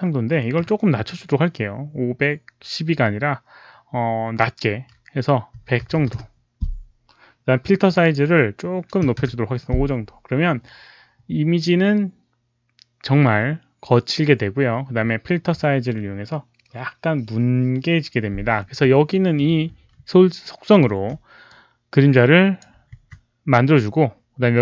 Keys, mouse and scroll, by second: 5.5 KP_1, 5.7 KP_0, 6.0 KP_0, 6.1 Return, 7.8 click, 7.8 Return, 7.8 KP_0, 7.8 KP_1, 7.9 click, 8.9 5, 9.2 Return, 19.0-19.8 alt+middle drag, 19.1 Return, 19.1 5, 20.8 shift+d, 21.4-22.5 drag, 22.8 shift+d.